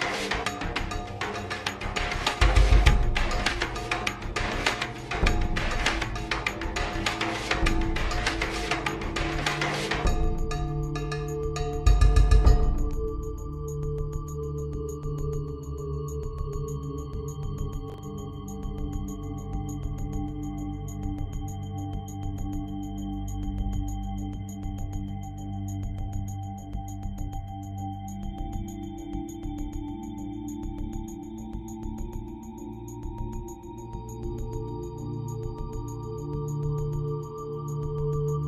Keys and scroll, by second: 18.1 ctrl+shift+Delete, 24.9 typing, 27.0 alt+shift+Delete, 27.4 v, 28.5 ctrl+t, 33.0 alt+shift+Return, 33.4 Up, 33.6 Up.